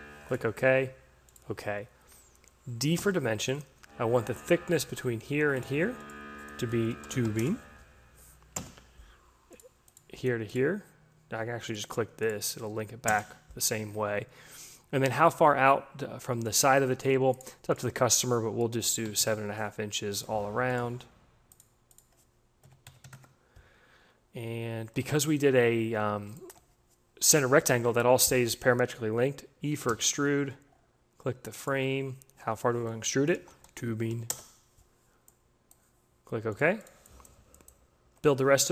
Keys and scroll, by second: 2.4 d, 6.3-7.6 typing, 12.4 Return, 15.3 d, 18.7 7, 18.9 Delete, 19.0 5, 19.1 Return, 22.5 7, 22.7 Delete, 22.9 5, 23.0 Return, 29.3 e, 33.0-34.4 typing.